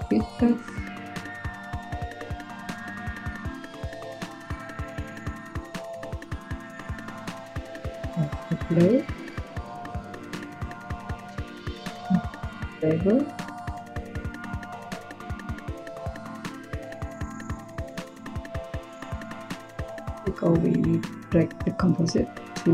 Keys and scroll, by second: 6.5 Tab, 7.5-8.9 typing, 11.9 Tab, 12.3-13.0 typing.